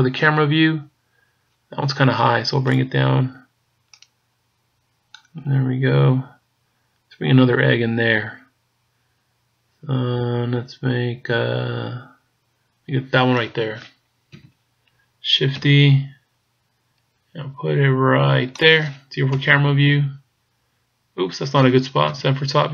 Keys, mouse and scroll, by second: 2.7 click, 14.4 KP_7, 15.6 shift+d, 19.3 KP_0, 22.1 KP_7.